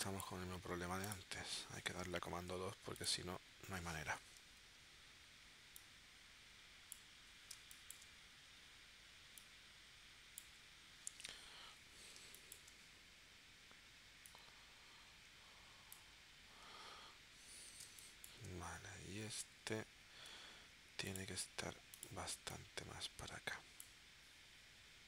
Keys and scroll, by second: 2.2 super+2, 3.7 shift+w, 7.6 space, 12.2 space, 17.9 space, 20.3 a.